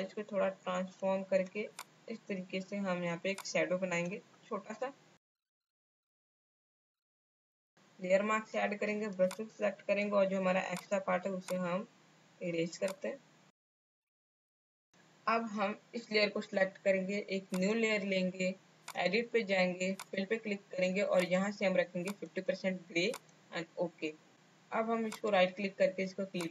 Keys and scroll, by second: 6.7 Up, 6.7 Left, 8.5 b, 13.7 space, 14.6 space.